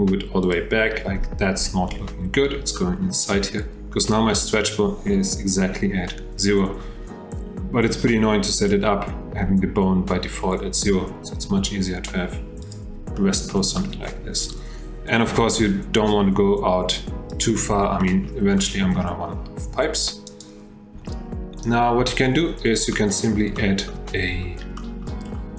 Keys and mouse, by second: 2.8 shift+drag, 11.4 g, 13.2-13.5 drag, 13.8 shift+click, 18.0 click, 18.6-19.0 shift+middle drag, 20.3 g, 21.0 F8, 22.0 F8, 23.0 click, 23.6-23.9 shift+drag, 24.8 shift+click, 25.1-25.5 shift+middle drag.